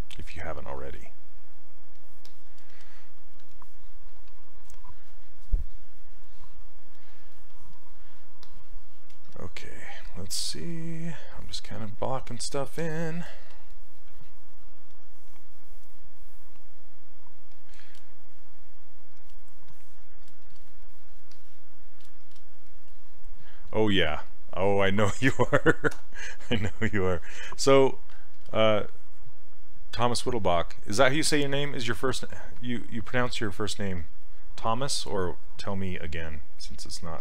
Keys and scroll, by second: 26.0 e.